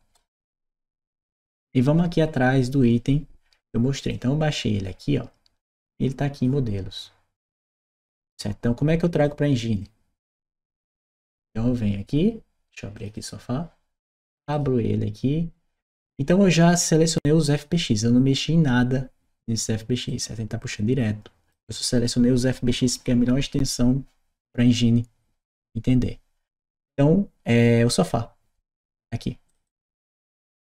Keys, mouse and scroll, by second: 3.9-6.2 drag, 9.0-10.8 drag, 12.7 click, 14.1 click, 14.3 click, 15.7-17.4 drag, 19.9-21.3 drag, 29.5 click.